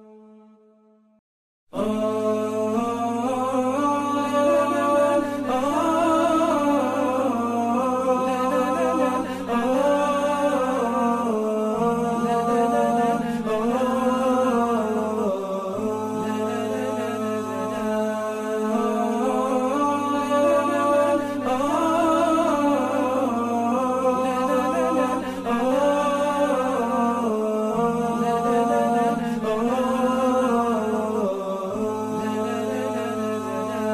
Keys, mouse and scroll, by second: 7.4-8.6 typing, 12.1 typing, 13.8 typing, 21.5 ctrl+5, 22.6 ctrl+z, 23.5 alt+scroll up 1, 27.0 alt+scroll down 1, 27.6 alt+scroll up 1, 28.6 ctrl+5, 29.8 right click.